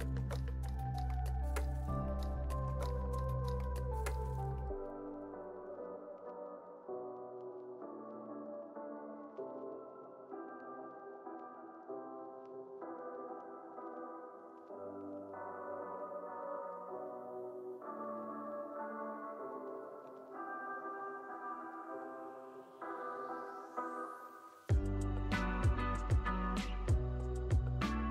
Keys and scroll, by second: 3.2 space.